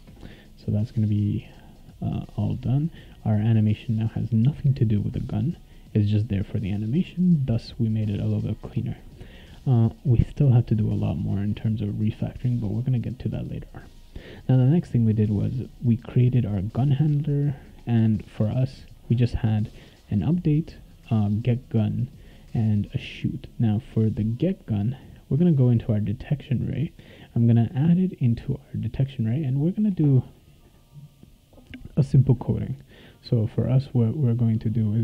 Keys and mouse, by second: 3.1 click, 6.5 click, 12.4 click, 14.4 click, 16.6 click, 17.1 click, 20.2 click, 21.5 click, 22.8 click, 24.4 click, 25.0 click, 26.1 click, 27.5 click, 27.7 click, 29.1 click.